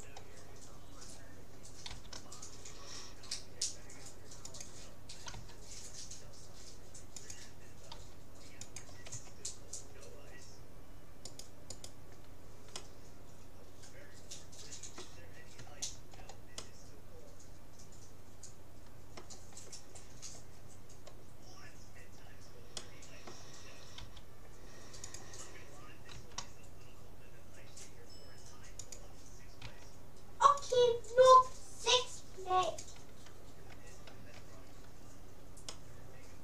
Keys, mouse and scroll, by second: 1.7-2.9 drag, 1.9 g, 5.3 r, 8.1 g, 9.1 a, 11.3-13.5 right drag, 12.9-14.1 middle drag, 14.1 click, 15.7-16.7 middle drag, 16.7 click, 17.3-18.3 middle drag, 20.7-22.1 middle drag, 22.1-22.5 scroll down 1, 22.5-22.9 scroll up 1, 22.9-24.5 middle drag, 24.0 g, 26.1 r, 29.7 s, 31.5 g, 34.3 a, 34.7-36.3 middle drag.